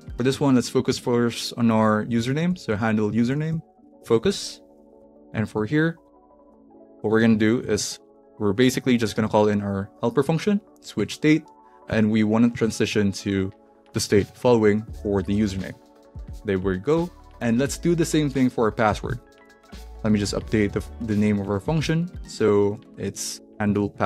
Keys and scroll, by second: 0.0-9.7 typing, 6.7 Right, 10.4 Down, 10.9 Return, 11.9 shift+9, 12.6 shift+', 13.6-15.5 typing, 15.7 Right, 16.9 ;, 19.2 alt+shift+Down, 19.5 alt+Left, 20.1 Left, 20.3 Left, 20.5 Left, 21.1 Left, 21.6 Left, 22.1-24.0 typing.